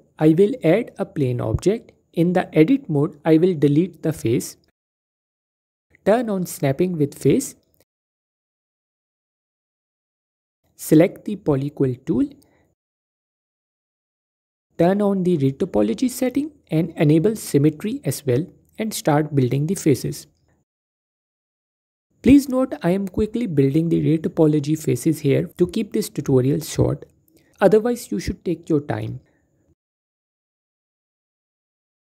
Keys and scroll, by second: 1.2 typing, 2.7 Tab, 4.0 x, 5.2 typing, 21.4 typing, 22.9 typing, 25.5 typing, 26.9 typing, 30.7 typing.